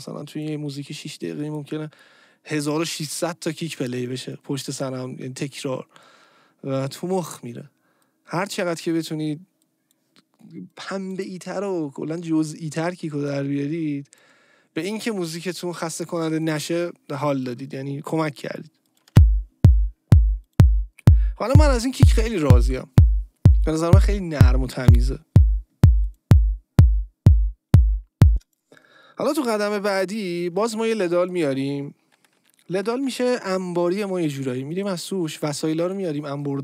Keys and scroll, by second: 19.1 space, 28.3 space, 29.9 ctrl+shift+t.